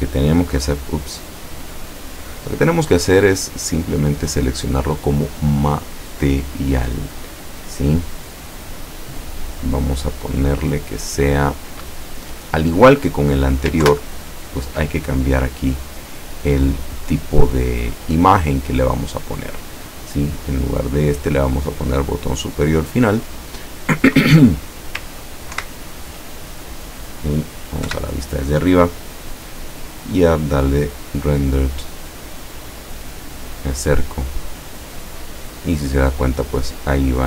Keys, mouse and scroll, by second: 0.9 click, 1.9 click, 2.6-2.9 scroll down 1, 3.1-4.4 middle drag, 5.3 click, 13.9 ctrl+Left, 16.1-18.2 drag, 20.4 click, 22.0 click, 25.6 ctrl+Right, 27.9 KP_7, 29.7 click, 31.1 click, 33.5-33.8 scroll up 1, 34.2 scroll up 1.